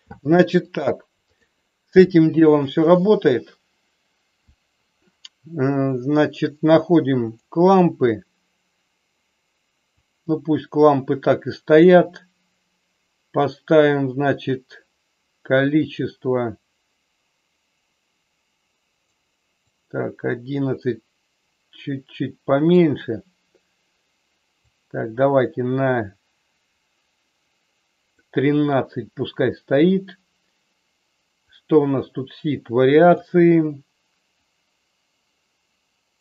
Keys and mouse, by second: 0.6 click, 7.2 click, 9.8-12.0 drag, 15.8-19.1 drag, 19.8-22.8 drag, 24.7-28.2 drag, 31.7-33.1 drag, 34.3-36.2 drag.